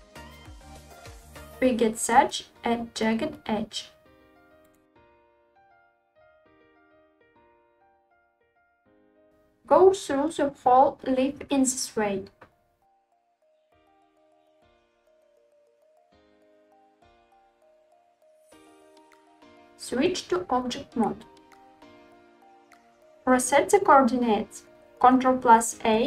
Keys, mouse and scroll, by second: 1.8 v, 4.5 click, 5.2 click, 6.3 g, 6.8 click, 8.8-9.8 drag, 13.3-17.9 typing, 13.7 click, 13.8 middle click, 14.6 click, 14.7 shift+middle click, 14.8 scroll up 1, 15.3 ctrl+z, 15.8 click, 15.9 middle click, 16.5 click, 16.6 click, 16.6 middle click, 16.7 click, 17.2 click, 17.2 middle click, 17.8 click, 18.1 shift+middle click, 18.6 middle click, 20.0 Tab, 20.8-22.1 middle drag, 22.5 middle click.